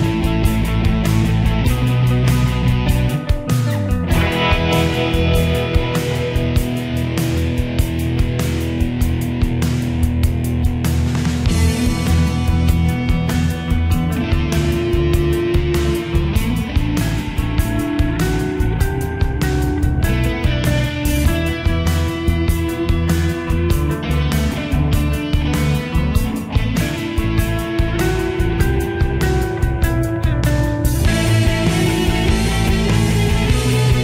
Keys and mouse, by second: 11.1 right click, 13.6 click.